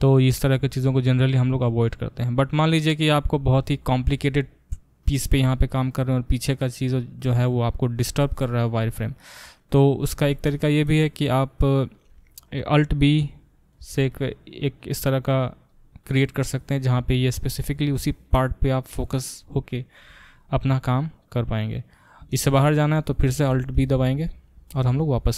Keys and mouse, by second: 13.8 alt+b, 20.3-25.3 drag, 23.7 alt+b.